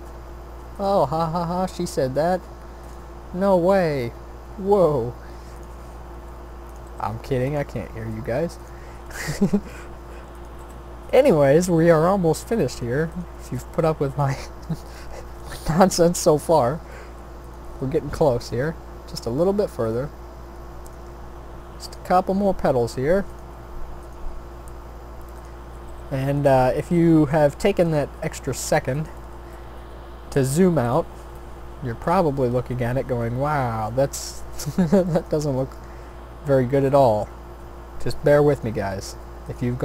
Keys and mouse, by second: 1.8 e, 3.9 e, 6.1 s, 6.9 g, 7.8 e, 8.9 s, 10.6 g, 11.8 click, 13.7 shift+d, 15.4 r, 16.6 e, 17.6 s, 18.6 e, 20.0 s, 21.0 e, 22.9 r, 23.5 s, 24.2 e, 25.9 r, 26.6 s, 28.2 g, 30.4-31.5 drag, 32.6 shift+d, 34.0 middle click, 34.5 r, 35.5 e, 37.1 s, 38.7 e.